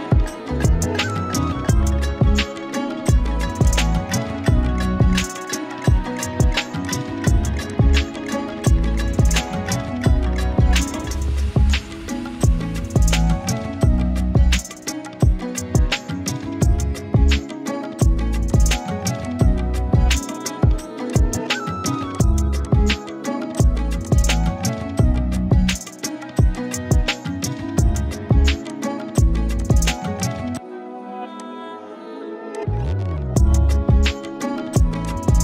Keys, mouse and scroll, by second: 1.1-2.7 shift+drag, 7.4 z, 7.7 click, 7.9-8.3 z, 8.7 click, 8.8-9.7 z, 18.4 alt+click, 22.1 z, 22.1-22.9 click, 22.5 space, 22.7 click, 26.4 z, 26.5 click, 27.2 right click, 28.7 click, 29.4-32.3 typing, 29.6 click, 30.1 click, 30.5-31.2 click, 33.5-35.4 drag.